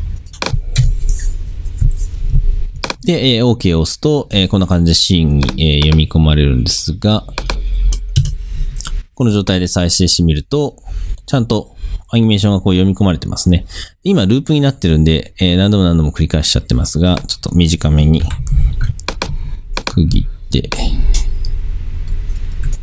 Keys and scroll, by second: 8.3 Return, 18.3 n.